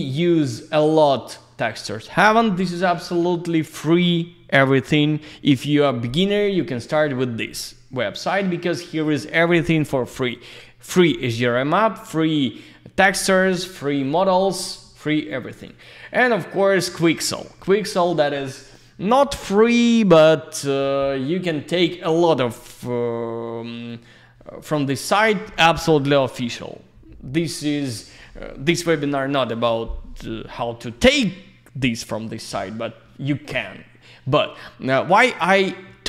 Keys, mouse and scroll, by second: 15.6 click, 16.8-17.6 scroll up 1.